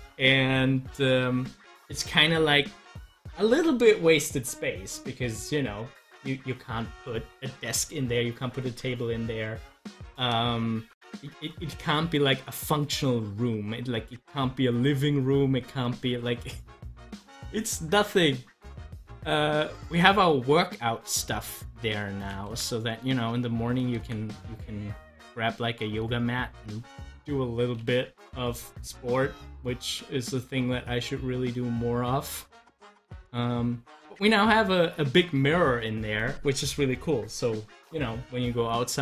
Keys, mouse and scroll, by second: 12.1-18.3 drag, 18.9-22.5 drag, 22.5 ctrl+z, 24.0 ctrl+z, 29.7 click, 30.1-39.0 drag.